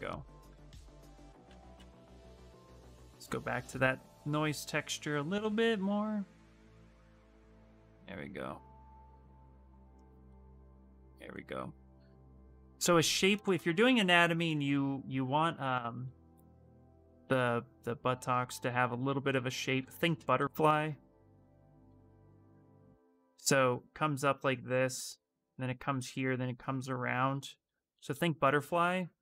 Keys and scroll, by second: 0.4 ctrl+z, 1.2 ctrl+z, 1.5 ctrl+z, 1.9 ctrl+z, 2.4 ctrl+z, 15.2-16.7 typing, 18.7 a, 19.1 s, 28.4 ctrl+shift+space.